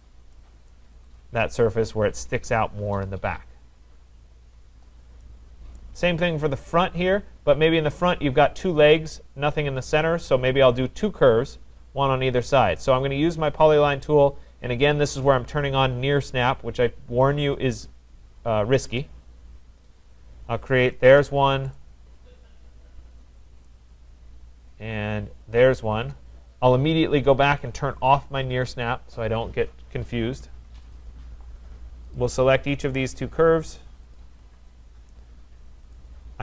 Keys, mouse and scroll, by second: 0.7 right click, 0.9 middle click, 0.9 typing, 1.1 Return, 1.1 click, 1.4 scroll, 4.7-5.0 scroll, 5.8 right click, 6.1-6.4 scroll, 13.6 click, 15.5 click, 17.5 click, 20.0 click, 21.1 Return, 21.7 right click, 23.2 click, 25.4 click, 26.0 Return, 27.6 click, 30.9 click, 32.2 click, 34.1 shift+click, 35.9 click, 36.3-36.4 typing.